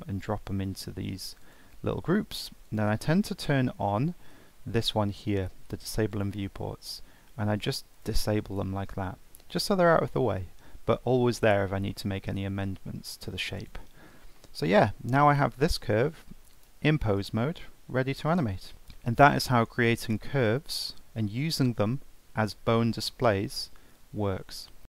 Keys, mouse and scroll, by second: 1.4 click, 2.7-5.8 drag, 7.9 click, 10.6-11.0 scroll down 2, 11.0-11.9 scroll up 2, 11.9-13.6 middle drag, 13.6 click, 14.0-14.4 scroll down 3, 14.4-15.6 middle drag, 15.6 ctrl+Tab, 16.1 middle click, 16.5 click, 17.3 g, 18.7-19.3 scroll down 1.